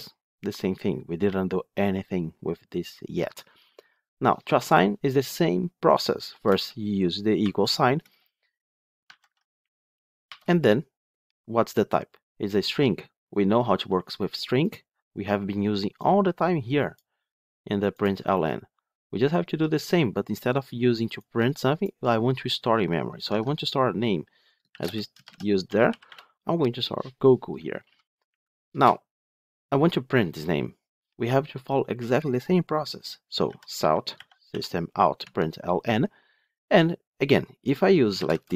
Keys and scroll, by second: 8.9 ctrl+z, 23.3 ctrl+Tab, 35.1 Tab.